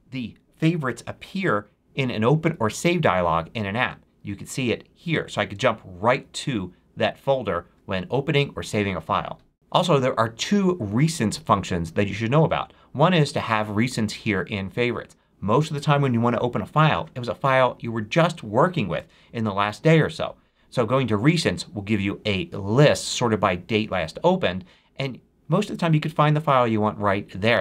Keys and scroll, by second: 2.3 super+o.